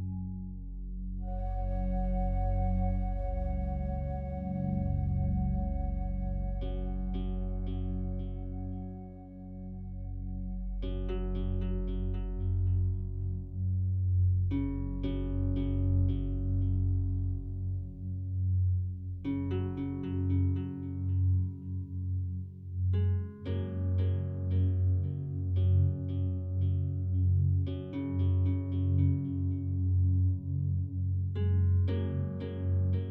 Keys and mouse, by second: 1.2 click, 2.2-9.0 drag, 9.7 click, 10.2 click, 11.4-14.6 drag, 15.3 click, 15.9 click, 17.6 i, 18.9 click, 19.9-30.1 drag, 32.7 click.